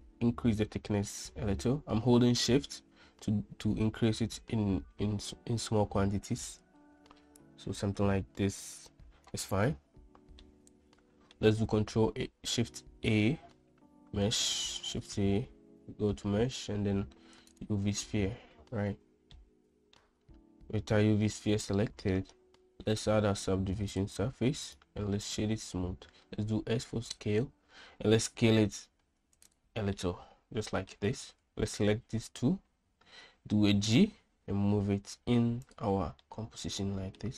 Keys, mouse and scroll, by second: 10.4-11.4 middle drag, 11.8 shift+a, 17.6 click, 19.5-20.1 middle drag, 23.1-24.1 drag, 24.8 click, 26.1 s, 29.5 click, 30.0-31.0 middle drag, 33.6 g, 36.4 middle click.